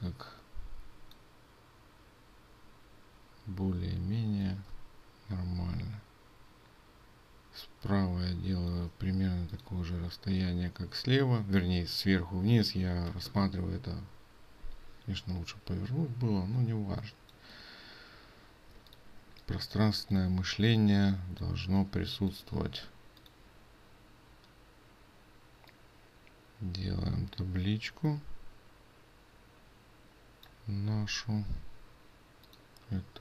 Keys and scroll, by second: 19.0 ctrl+space.